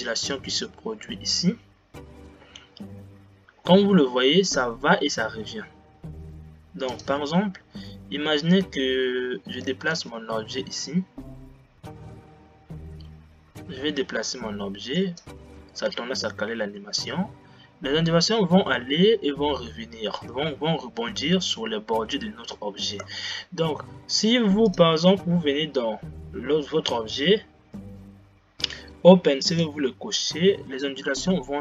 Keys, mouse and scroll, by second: 7.2 click, 10.2 g, 23.5 space, 24.8-26.0 drag.